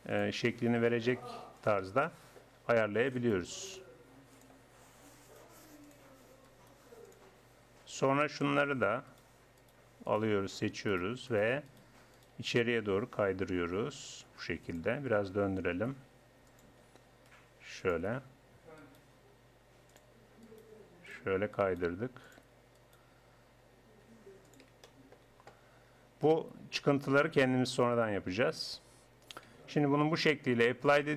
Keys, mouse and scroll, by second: 1.0 click, 1.0 g, 2.1 middle click, 3.2 click, 3.6-4.8 right drag, 5.2 right click, 9.1-13.9 drag, 13.5 g, 15.2 r, 16.9 g, 18.8 right click, 19.2 right click, 20.5 right click, 21.7 right click, 24.1 g, 27.9-29.6 drag, 29.6 Tab.